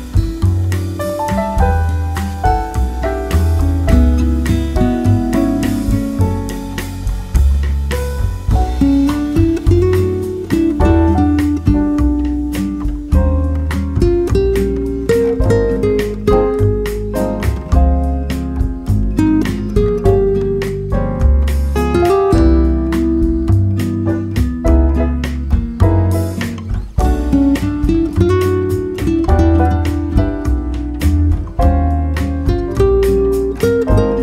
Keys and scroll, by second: 8.7 ctrl+c, 11.1 ctrl+v, 21.9 Return.